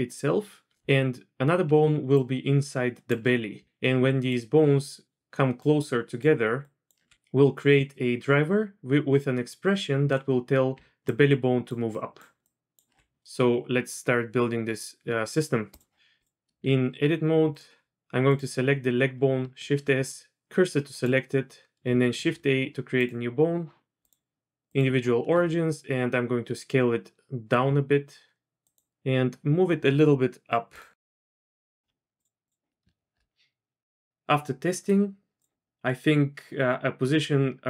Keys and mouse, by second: 1.6 d, 2.1-3.2 drag, 3.1 d, 3.2 d, 3.6 ctrl+z, 3.8-7.0 d, 4.3-6.2 drag, 6.6 click, 10.7-12.9 d, 11.0-12.9 drag, 15.7 click, 16.2 click, 16.6 Tab, 18.2 click, 19.6 shift+s, 22.1 shift+a, 24.1-24.7 drag, 25.3 s, 28.9 g, 32.2 click, 32.4 click, 33.1 middle click, 34.1 ctrl+z, 34.1 d, 35.4 click.